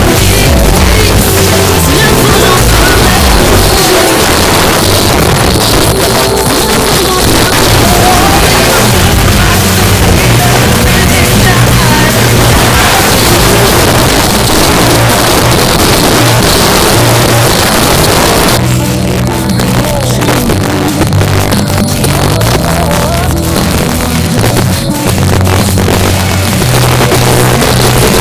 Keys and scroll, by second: 4.2 Page_Down, 13.8 Page_Down.